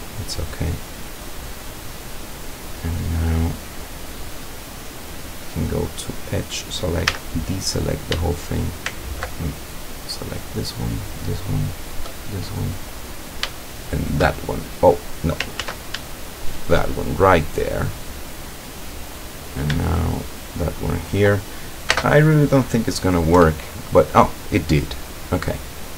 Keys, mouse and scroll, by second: 5.5 click, 5.9-6.6 scroll up 2, 7.2 a, 9.9 shift+right click, 10.7 shift+right click, 11.7 shift+right click, 12.2-13.5 shift+middle drag, 14.0 shift+right click, 15.6 ctrl+z, 16.5 shift+right click, 17.0 shift+scroll down 1, 17.3-19.7 shift+middle drag, 20.3 shift+right click, 22.0 space, 23.4 Return, 24.9-25.2 scroll down 2, 25.5-25.9 middle drag.